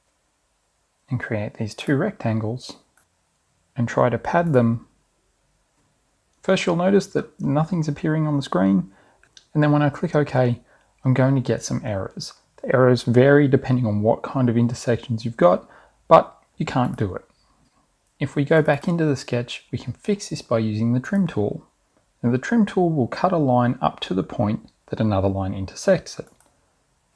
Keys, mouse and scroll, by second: 0.9 click, 3.0 ctrl+s, 10.4 click, 17.9 click, 20.4 click, 25.6 click.